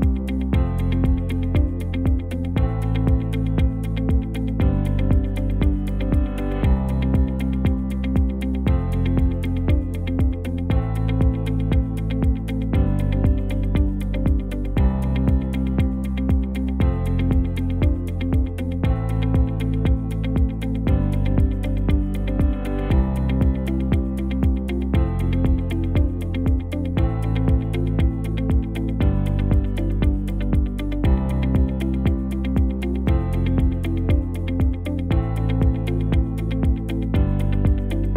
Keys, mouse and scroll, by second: 7.1 space, 7.9 space, 14.2 space, 16.0 space, 17.0 space, 18.4 ctrl+s, 24.2 ctrl+s, 31.8 ctrl+shift+d.